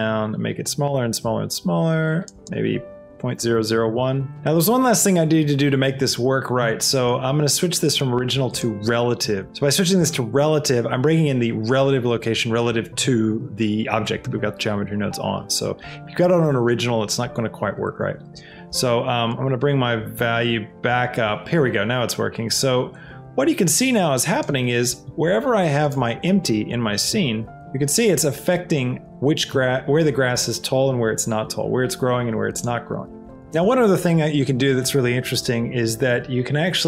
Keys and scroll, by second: 3.5 KP_0, 3.8 Return, 4.3 Escape, 27.3 g, 27.5 x, 29.7 g, 30.8 g, 31.2 y.